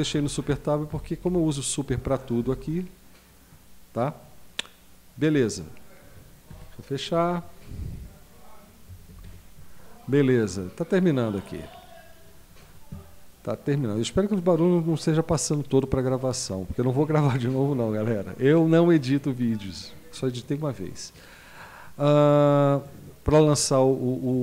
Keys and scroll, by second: 0.1 Up, 0.4 Down, 0.9 Up, 1.2 Down, 2.4 Down, 6.5 Escape, 9.1 super+q.